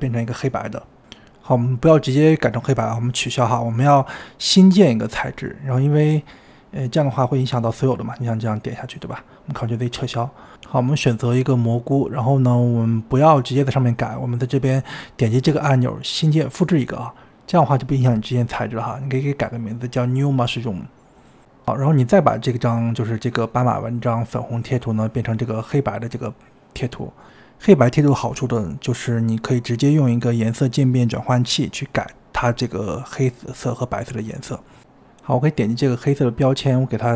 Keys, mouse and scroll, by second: 8.8 ctrl+z, 14.2-15.9 middle drag, 16.9-21.8 drag, 21.8 o, 25.4 click, 26.5 click, 34.5-35.2 scroll up 3, 35.5 click.